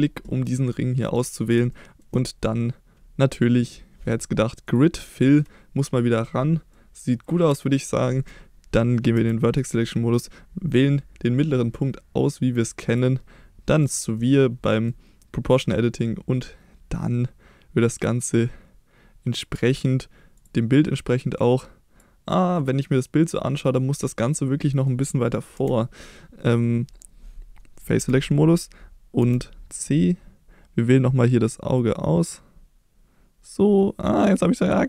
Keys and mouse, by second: 1.1 middle click, 1.7 shift+middle click, 3.6-4.7 drag, 6.7-7.4 middle drag, 9.1 1, 10.9-11.4 middle drag, 12.6 click, 12.8-14.3 drag, 14.6 middle drag, 15.6-19.4 drag, 22.5-24.8 middle drag, 25.5 KP_1, 27.9 3, 29.2 c.